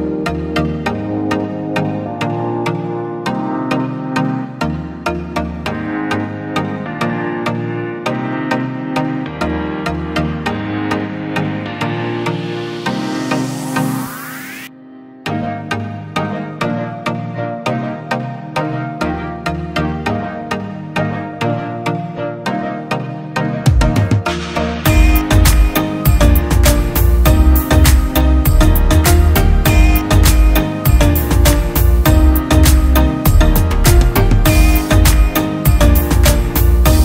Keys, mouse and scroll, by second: 5.8 typing, 19.3 double click, 20.3-23.1 scroll up 1, 23.8 e.